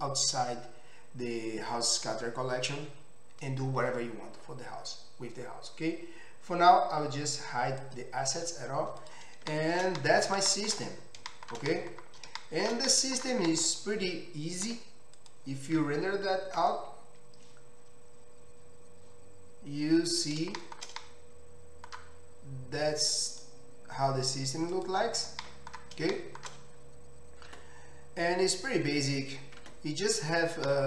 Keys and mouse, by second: 7.9 click, 8.0-9.0 middle drag, 9.0 click, 9.2-23.3 shift+middle drag, 14.7 z, 23.3-30.8 drag, 27.6 Tab, 29.7 Tab.